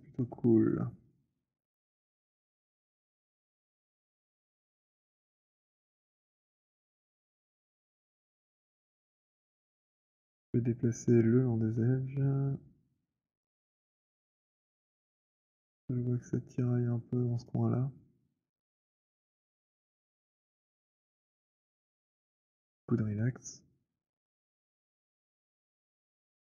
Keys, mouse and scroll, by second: 0.0 alt+middle click, 0.5 alt+click, 1.1 click, 4.1 right click, 4.5 middle click, 7.0 click, 8.6 b, 13.1 right click, 17.5 click, 19.6 alt+middle click, 20.8 w, 22.3 right click, 22.7 click, 24.2 click.